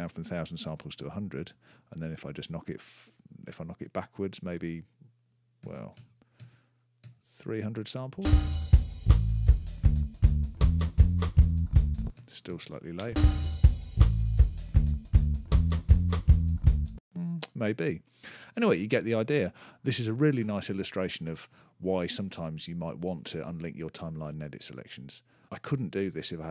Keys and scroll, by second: 5.3 -, 8.0 space, 11.7 space, 16.7 space.